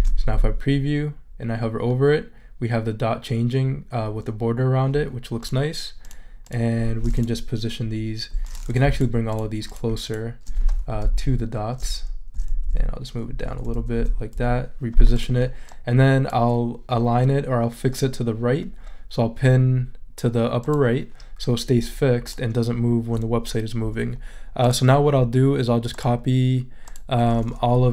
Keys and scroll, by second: 0.4 shift+super+e, 11.1 shift+Right, 12.3 shift+Down, 13.8 Up, 14.3 Down.